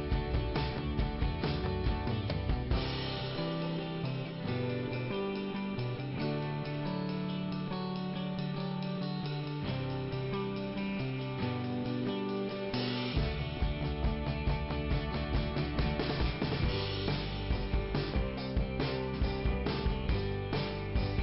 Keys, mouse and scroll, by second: 3.5 scroll up 1, 5.1 click, 5.8 click, 6.6 double click, 6.9 double click, 7.9 click, 9.3 click, 10.1 right click, 11.0 click, 11.2 click, 11.7 right click, 12.3 right click, 14.0 click, 14.5 right click, 15.6 click, 17.4 click, 18.1 right click, 19.4 click.